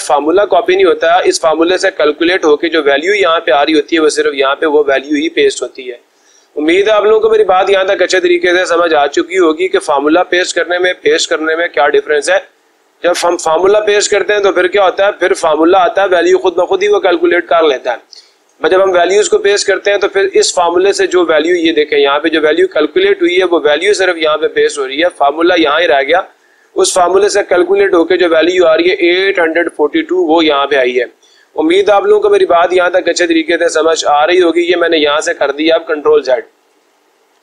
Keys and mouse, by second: 5.8 Escape, 22.4-23.4 drag, 23.8-24.8 drag, 32.2 ctrl+z, 33.3 ctrl+z, 36.5-37.4 drag.